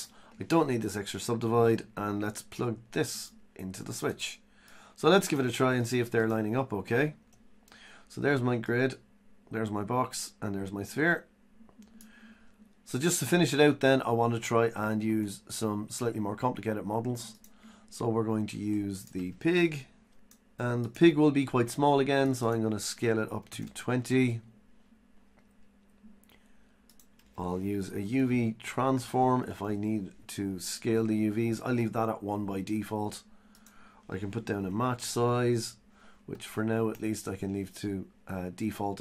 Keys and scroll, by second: 1.0 Delete.